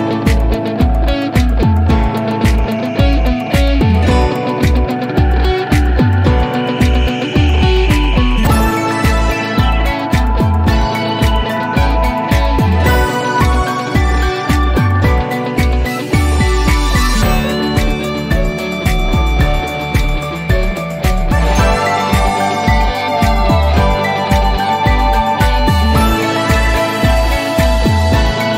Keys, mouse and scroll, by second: 15.3 click, 21.1 click, 21.9-23.3 scroll up 1, 23.4-28.5 drag.